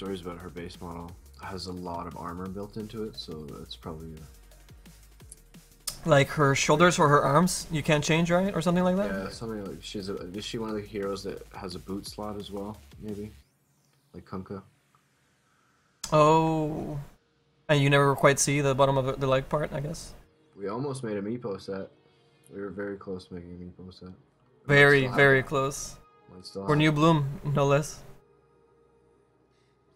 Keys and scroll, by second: 15.7 s.